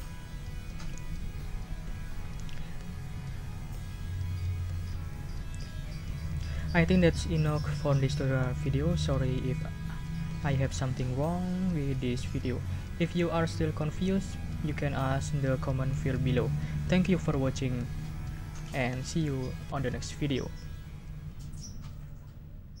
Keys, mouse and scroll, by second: 0.0 ctrl+scroll up 2, 5.0 click.